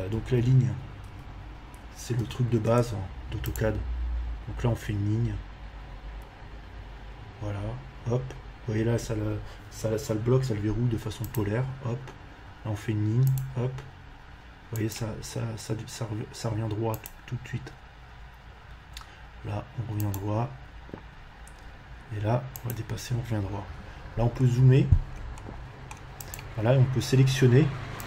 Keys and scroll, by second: 0.1 l, 1.0 v, 2.2 BackSpace, 2.6 space, 23.8 Escape.